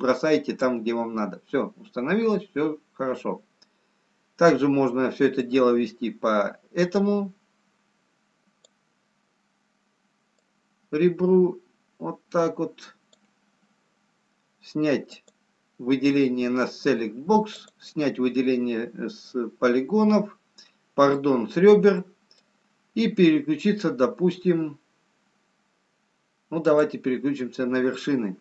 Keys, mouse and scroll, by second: 5.4 click, 10.4 click, 16.0 click, 17.7 click, 19.2 middle click, 22.0 middle click, 26.6 click, 27.9 middle click.